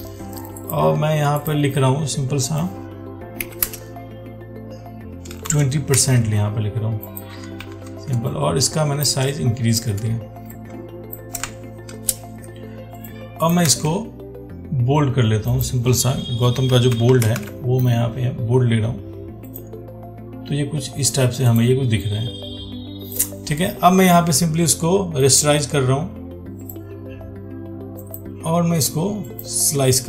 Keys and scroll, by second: 6.2 ctrl+a, 14.0 ctrl+a.